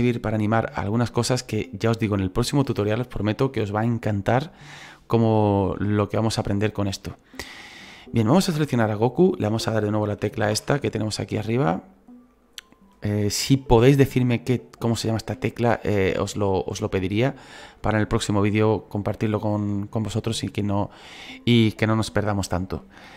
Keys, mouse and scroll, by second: 5.4 scroll up 5, 5.8-7.9 shift+middle drag, 7.9-10.5 right drag, 10.5 /, 12.0-14.9 drag, 14.9 /, 15.3 /, 15.5 /, 16.7 /, 17.0 /.